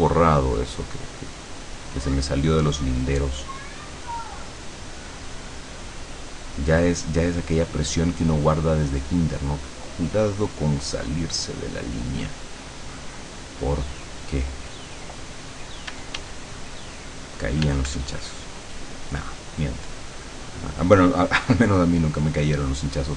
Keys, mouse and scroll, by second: 16.0 d, 16.6-17.6 drag, 17.7 f, 18.3-22.9 drag.